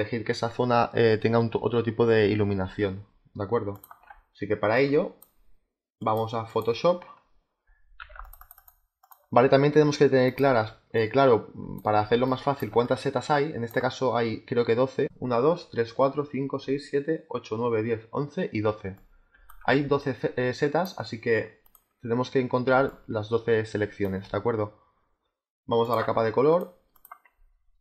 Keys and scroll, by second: 6.5 space, 7.9 z, 21.7 space.